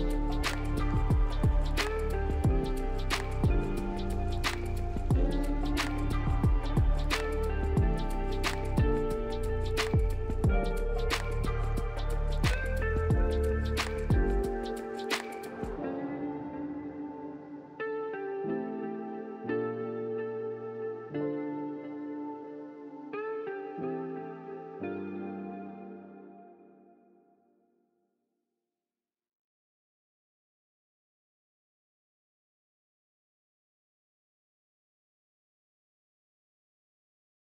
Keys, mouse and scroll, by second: 0.0-0.4 typing, 2.5 double click, 3.0-4.0 typing, 5.8 double click, 7.2 1, 7.3 Return, 19.1 scroll up 2, 20.0-20.8 scroll down 3.